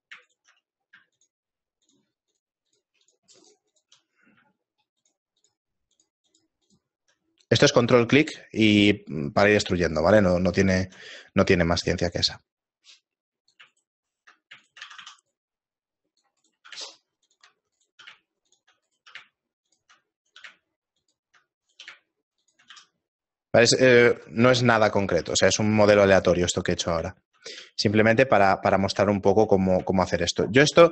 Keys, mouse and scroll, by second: 0.3 shift+right click, 1.2 ctrl+click, 1.9 ctrl+click, 2.7 ctrl+click, 3.0 ctrl+click, 3.2 ctrl+click, 3.7 ctrl+click, 4.1 middle click, 5.0 ctrl+click, 5.4 ctrl+click, 8.8 ctrl+click, 10.6 ctrl+click, 11.2 middle click, 13.5 right click, 13.8 shift+right click, 14.0 right click, 14.6 right click, 14.8 f, 15.0 a, 15.3 right click, 16.4 right click, 16.7 g, 17.8 right click, 18.0 g, 18.9 right click, 19.1 g, 20.2 right click, 20.4 g, 21.6 right click, 21.8 g, 22.7 a, 23.0 middle click, 23.3-23.6 scroll down 2, 24.1 Tab, 24.8 middle click, 25.2 z, 25.6 shift+middle click, 26.1 right click, 27.5 shift+middle click, 28.2 s, 29.4 shift+middle click, 30.0 shift+middle click, 30.7 KP_7.